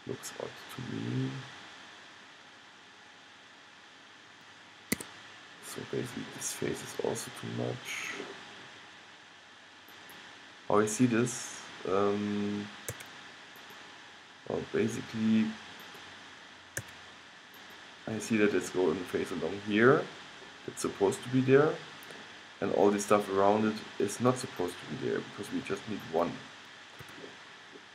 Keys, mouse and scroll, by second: 8.1-10.0 drag, 13.0-16.0 middle drag, 13.0 x, 17.0 x, 17.9-21.5 middle drag, 24.8-27.9 drag, 27.1 g.